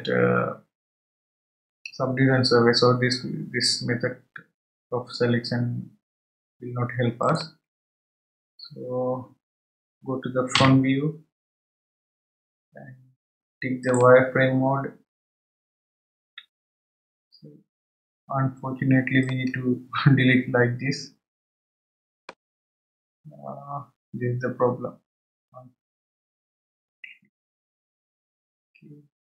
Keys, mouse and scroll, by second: 7.2 click, 8.4-8.9 scroll down 4, 13.8 click, 19.2 click, 25.2-26.2 scroll up 2, 27.4-29.0 scroll up 1.